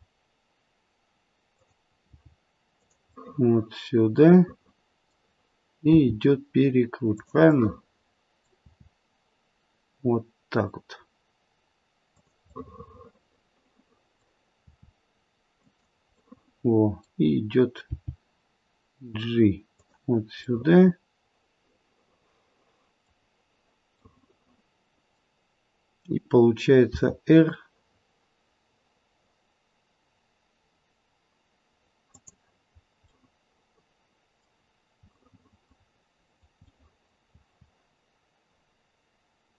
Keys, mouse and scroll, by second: 2.2 g, 3.1 middle click, 3.9 middle click, 4.4 middle click, 4.9 middle click, 5.9 r, 7.4 middle click, 8.2 middle click, 8.6 r, 12.5 middle click, 12.9 middle click, 14.5 r, 16.2 middle click, 17.8 g, 20.5 middle click, 24.0 middle click, 26.8 r, 32.8-33.2 scroll up 3, 33.1 middle click, 35.2 middle click, 35.4 middle click, 35.8-36.3 scroll down 3, 36.3 middle click, 36.6 middle click, 37.3 middle click, 37.3 r.